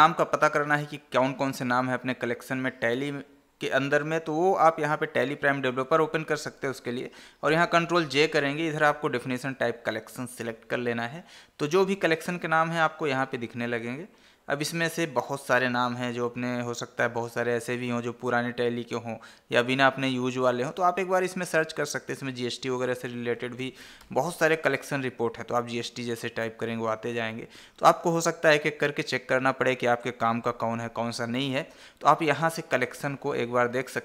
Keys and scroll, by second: 7.8 ctrl+j, 31.8 Escape.